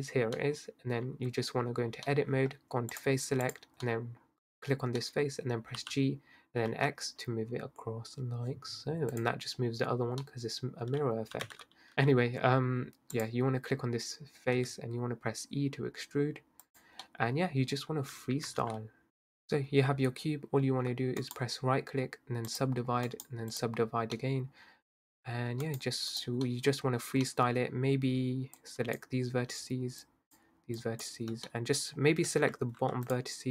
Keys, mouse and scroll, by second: 0.4 middle click, 1.0 Tab, 2.1-2.9 middle drag, 2.9 click, 3.9-5.8 middle drag, 5.8 g, 10.2-11.4 middle drag, 11.4 g, 11.9-13.1 middle drag, 13.1 click, 14.6 e, 17.1-18.6 middle drag, 18.6 ctrl+r, 19.1 scroll up 5, 19.3 Tab, 19.5-20.2 scroll down 2, 20.2-20.9 scroll up 4, 20.9-21.3 scroll down 2, 21.3-24.3 right drag, 24.3-25.1 scroll up 1, 25.1-25.7 scroll down 2, 25.7-27.0 right drag, 27.0-27.7 scroll up 3, 27.7-28.6 scroll down 2, 28.6 click, 30.1 shift+click, 30.8 shift+click, 32.1-32.5 scroll down 2, 33.1 alt+shift+click.